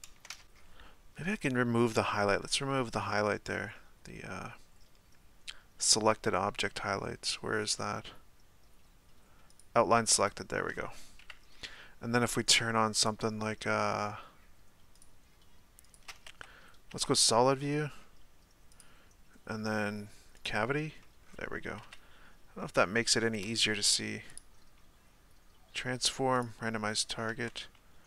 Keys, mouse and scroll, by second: 0.4-9.5 middle drag, 9.5 click, 10.1-11.2 middle drag, 11.2 KP_1, 12.4-16.5 drag, 16.5 z, 17.0 z, 17.6-18.7 middle drag, 18.7-21.0 drag, 21.0 middle click, 21.8 KP_1, 26.4-28.0 drag.